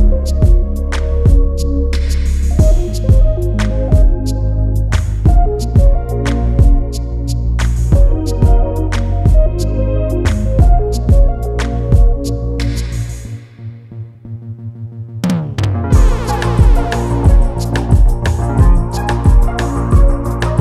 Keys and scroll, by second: 3.9 ctrl+s, 4.6 ctrl+alt+s.